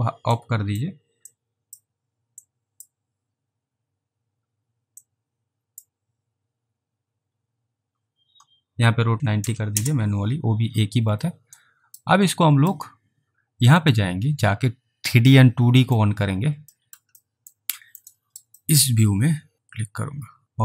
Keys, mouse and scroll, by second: 0.4 click, 1.4 click, 2.5 click, 3.7 scroll down 1, 5.1 click, 9.2 typing, 9.7 Return, 11.7 alt+right click, 12.4 alt+middle click, 13.8 click, 15.9 click, 16.8 alt+middle click, 17.3 alt+middle click, 17.9 alt+middle click, 18.2 alt+right click, 18.7 alt+middle click, 19.5 click.